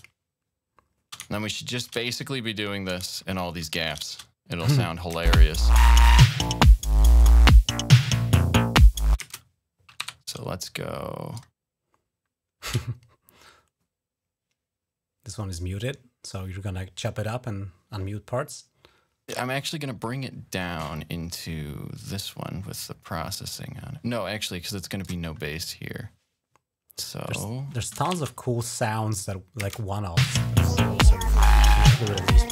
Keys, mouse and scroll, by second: 0.0-0.3 shift+scroll up 2, 0.7 shift+scroll up 2, 1.1 ctrl+scroll down 2, 1.9 shift+scroll up 1, 3.0 ctrl+scroll up 1, 4.4 click, 5.1 space, 9.2 space, 9.8 g, 10.5 click, 11.6 click, 12.9-19.1 ctrl+drag, 14.3 typing, 20.7-21.7 drag, 23.4-24.2 typing, 23.7-25.1 drag, 25.8-26.5 typing, 28.0 alt+1, 29.2 click, 29.4 right click, 29.4 space.